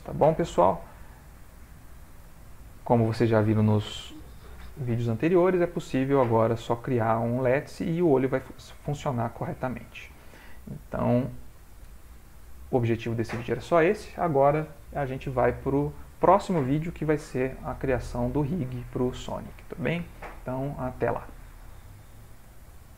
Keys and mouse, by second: 1.6 click, 2.3 ctrl+middle click, 3.2 ctrl+middle click, 8.2 middle click, 11.2 click, 12.2 click.